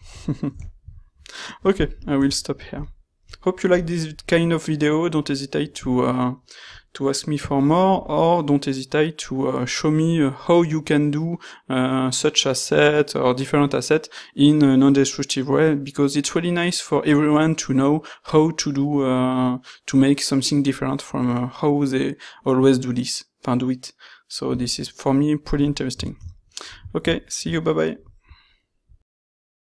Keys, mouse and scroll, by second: 1.5 shift+middle drag, 1.7 middle drag, 3.5 shift+middle drag, 3.9 middle drag, 27.4 middle click.